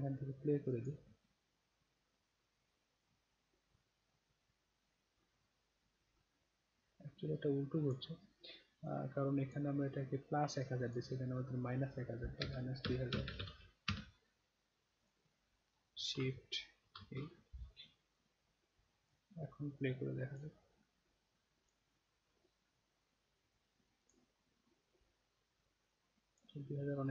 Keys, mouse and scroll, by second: 0.8 click, 7.8 click, 8.8-9.5 drag, 10.8 click, 15.0 click, 16.9 shift+e, 18.1-19.0 drag, 20.3 click, 24.0 click, 25.8-26.3 drag.